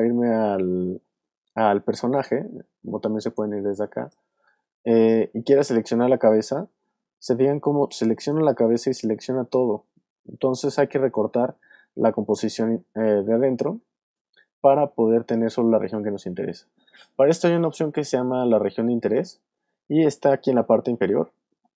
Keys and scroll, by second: 7.7 alt+space, 8.7 space, 9.3 super+z.